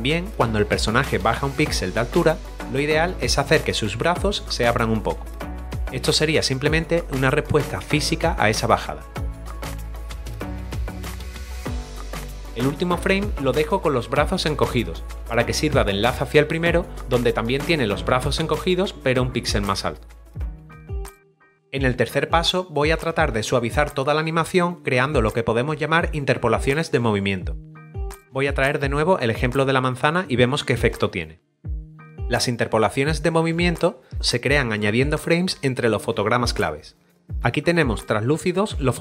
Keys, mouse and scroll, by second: 3.1 middle click, 3.8 scroll up 1, 4.5 middle click, 5.6 click, 6.0 double click, 6.6 click, 7.1-7.6 scroll up 1, 7.6 s, 8.3 click, 9.3 ctrl+click, 9.4 click, 9.5 Return, 9.5 ctrl+d, 9.7 right click, 9.7 click, 9.9 s, 10.0 click, 10.3 shift+click, 10.6 shift+click, 10.8 Return, 11.1 right click, 11.3 click, 11.3 right click, 11.4 click, 11.6 right click, 11.6 click, 11.9 right click, 11.9 double click, 17.4 click.